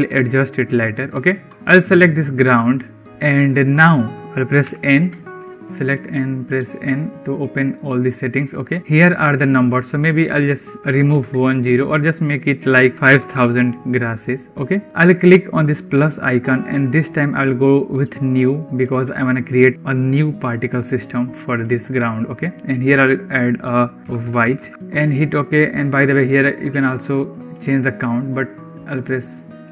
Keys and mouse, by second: 2.3-3.0 drag, 3.7 click, 4.5 n, 5.2 shift+drag, 9.4-13.9 drag, 13.0 0, 13.2 0, 15.8-29.7 drag.